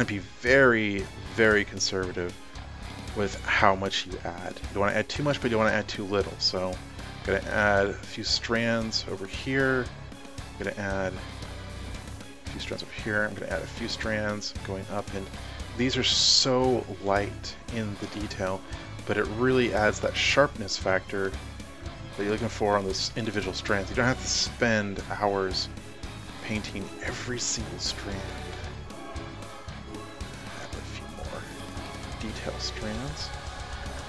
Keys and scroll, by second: 0.9 typing.